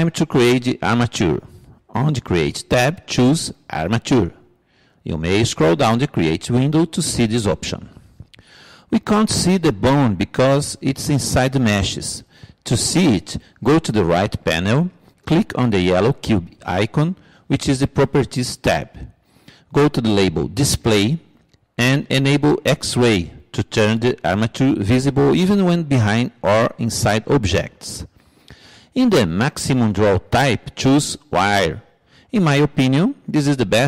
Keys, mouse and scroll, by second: 5.3-8.8 middle drag, 8.0-9.8 drag, 17.0-18.7 drag, 19.0-20.7 drag, 20.7-24.2 middle drag, 24.7-26.5 drag, 26.9-28.5 drag, 28.6 click, 33.4-33.8 drag.